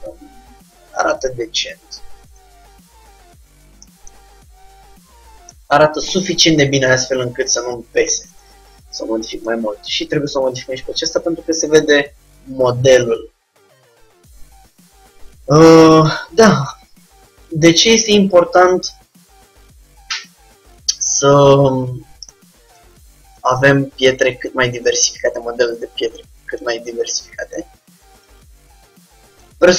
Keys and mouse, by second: 2.4-4.0 drag, 4.0-7.5 middle drag, 7.6 click, 8.4 Tab, 14.0-17.0 middle drag, 17.1 middle click, 17.8-19.4 drag, 19.4 g, 23.4-25.1 drag, 24.1 g, 25.9-27.5 drag, 26.1 g, 28.3-29.7 drag.